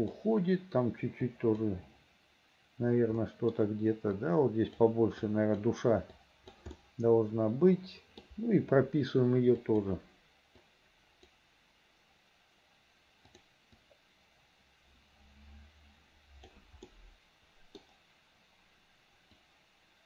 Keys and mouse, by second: 1.4 right click, 3.3 middle click, 3.4 click, 4.3 click, 5.4 click, 6.2 click, 6.9-8.3 middle drag, 9.7 right click, 10.7 right click, 13.5 right click, 13.9-16.7 right drag, 17.0 middle click, 19.5 click.